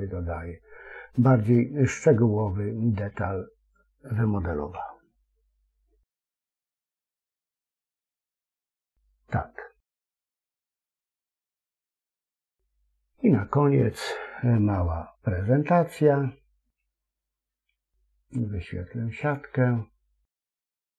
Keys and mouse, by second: 0.2-4.0 middle drag, 4.6 KP_1, 12.5 shift+c, 19.1-20.9 drag.